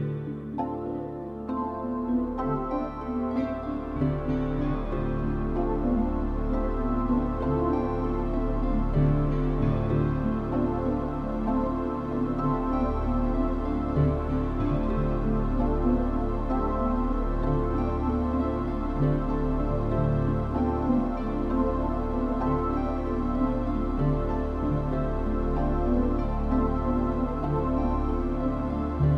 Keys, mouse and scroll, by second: 0.9 Escape, 1.2 click, 1.8 click, 2.7 scroll down 3, 2.8 scroll up 1, 3.0-3.5 scroll down 4, 3.5 shift+middle click, 4.5 g, 6.1 click.